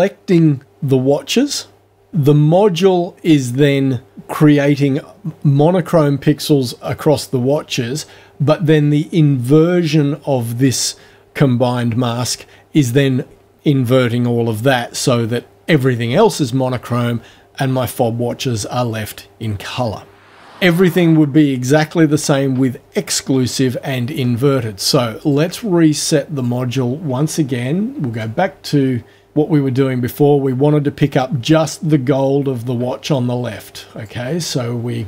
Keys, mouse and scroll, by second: 25.2 click, 26.4 click, 28.2 click, 33.2-34.2 drag.